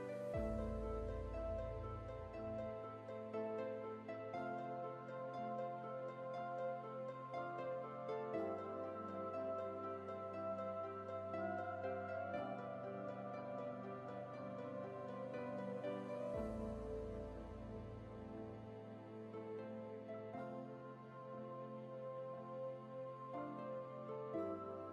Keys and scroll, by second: 4.4 alt+BackSpace, 9.8 alt+BackSpace.